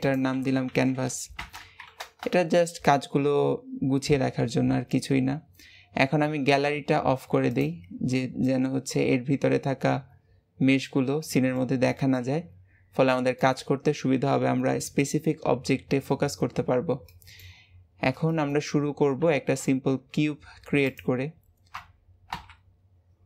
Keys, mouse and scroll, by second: 7.5 click, 8.3-11.5 middle drag, 11.9-12.5 shift+middle drag, 12.5-13.0 scroll up 2, 13.0-16.1 middle drag, 17.0-18.5 shift+middle drag, 18.5-19.2 scroll up 2, 19.2 shift+a, 22.3 KP_Decimal, 23.0-23.2 scroll down 6.